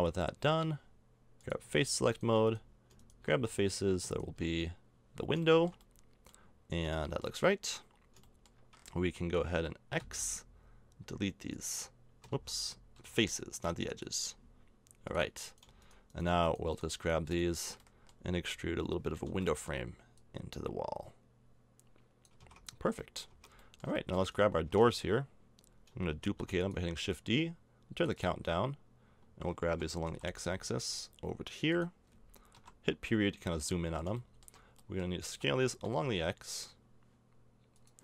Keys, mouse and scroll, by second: 0.4 Tab, 1.6 z, 3.3 z, 5.4 middle click, 7.1 middle click, 10.0 x, 12.3 ctrl+z, 13.0 x, 17.0 middle click, 18.3 e, 22.3 a, 22.4 Tab, 23.3 Tab, 23.5 middle click, 24.3 middle click, 24.7 Tab, 24.8 right click, 26.2 shift+d, 29.7 g, 32.5 KP_Decimal, 35.3 s.